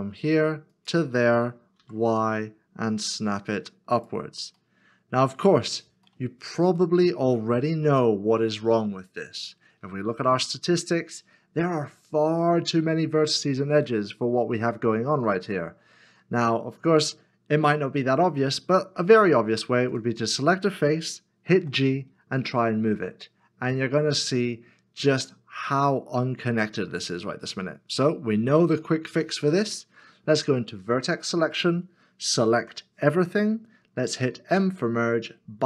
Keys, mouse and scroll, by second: 1.8 r, 4.6 y, 4.6 middle click, 6.9 shift+middle click, 7.8 scroll up 1, 8.9 middle click, 15.4 middle click, 20.9 scroll down 1, 21.6 g, 28.3 ctrl+z, 28.9 middle click, 30.8 1, 32.6 a, 34.5 m.